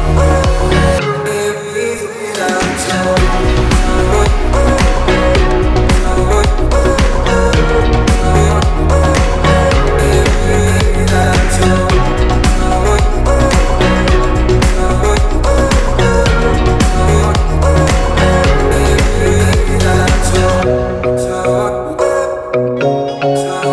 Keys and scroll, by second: 11.9 ctrl+a, 12.6-13.5 typing, 13.8 Return.